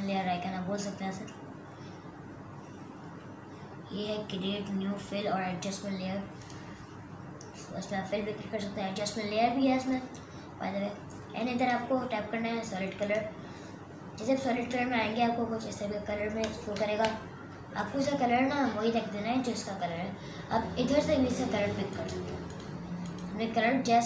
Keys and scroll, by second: 17.2 super+KP_Subtract.